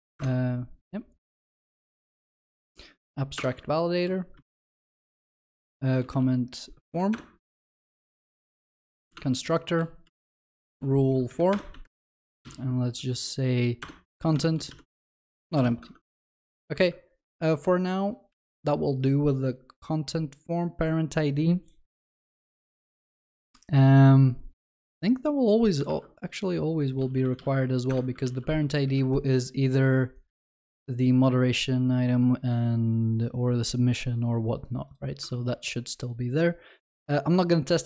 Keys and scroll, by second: 3.4 Return, 9.1 Return, 9.2 Tab, 18.3 ctrl+b, 24.8 ctrl+alt+Left, 25.8 ctrl+alt+Left, 27.8 ctrl+d, 28.3 ctrl+s, 31.2 ctrl+alt+Left, 35.3 ctrl+s.